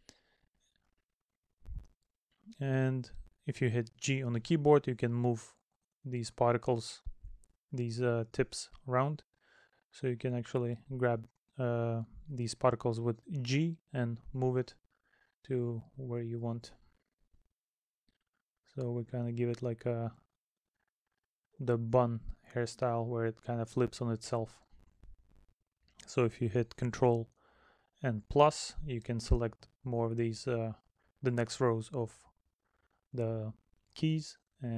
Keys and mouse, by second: 0.3 middle click, 1.6 middle click, 9.7 middle click, 11.6 middle click, 17.6 middle click, 19.3 middle click, 23.1 middle click, 26.2 middle click, 29.4 middle click, 31.0 middle click.